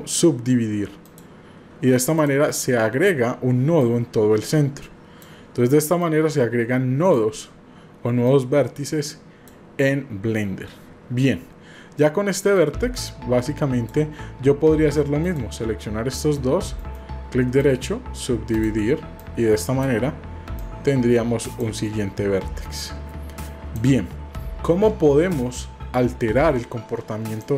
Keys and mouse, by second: 2.2 click, 3.8-5.2 drag, 6.0-7.1 drag, 8.2-9.5 drag, 12.5-13.9 drag, 15.2 shift+click, 16.8 right click, 18.5 click, 19.2 click, 20.6-21.7 drag, 22.8 click, 27.3 click.